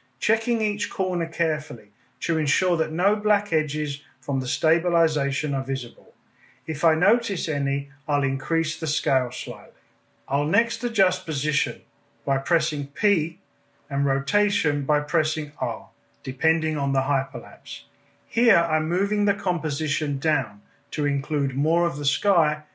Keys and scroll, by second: 4.7 space, 10.4 p, 12.5 Down, 21.0 r.